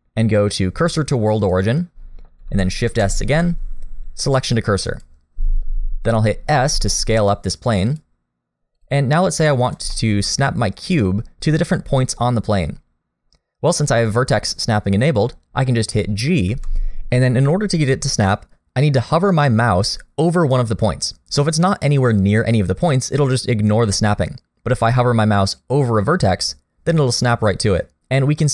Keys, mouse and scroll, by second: 2.9 shift+s, 6.5 s, 8.8 click, 9.3 middle click, 9.9 shift+middle click, 10.4-10.8 scroll up 1, 10.8 middle click, 14.3 middle click, 14.6 shift+middle click.